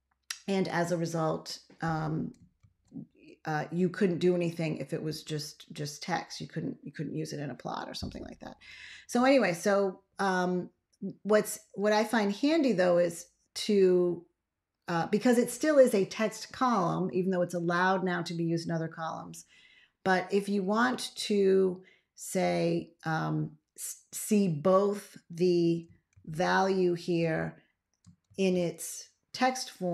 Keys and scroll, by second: 2.5 ctrl+x, 26.0 ctrl+a, 28.1 ctrl+x.